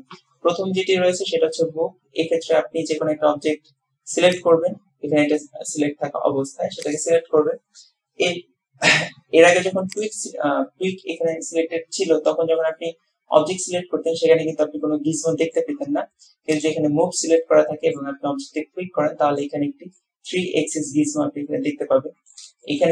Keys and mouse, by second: 4.4 click, 7.0 click, 10.0 click, 13.5-15.8 drag, 16.6 click, 17.5-18.1 drag, 18.7-19.6 drag, 20.0-20.8 drag, 20.8-22.5 middle drag, 22.8 shift+middle drag.